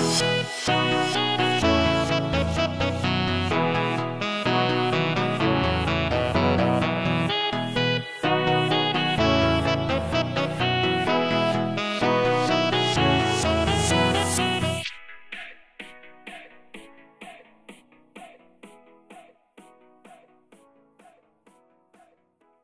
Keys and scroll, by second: 0.0-0.1 typing, 1.8 q, 2.2 s, 2.9 d, 3.8 Escape, 9.8 w, 10.1 a, 10.9 e, 11.8 w.